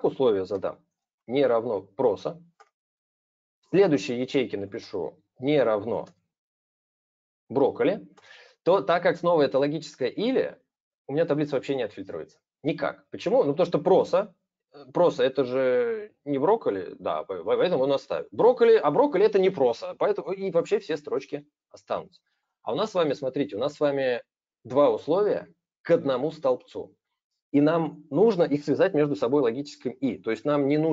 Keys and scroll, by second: 0.3 super+space, 4.5 super+space, 5.8 super+space.